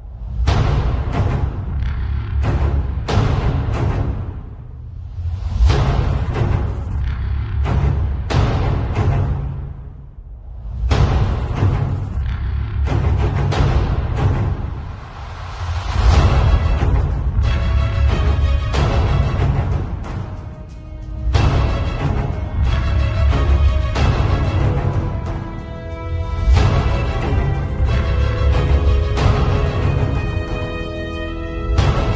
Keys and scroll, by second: 4.2 space, 6.4-10.0 typing, 18.9 r, 19.6 b, 23.5 z, 24.0 space, 24.9 b, 26.4 ], 27.4 ], 28.3 space, 28.7 r, 29.3 b, 30.4 ], 31.3 ].